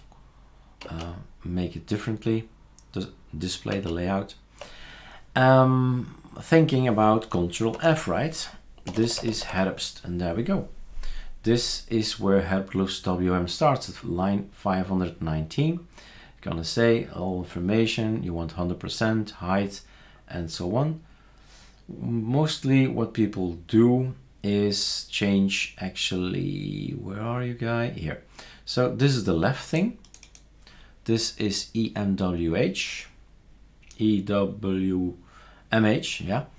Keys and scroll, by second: 3.7 super+space, 7.7 ctrl+f, 8.6-10.0 typing.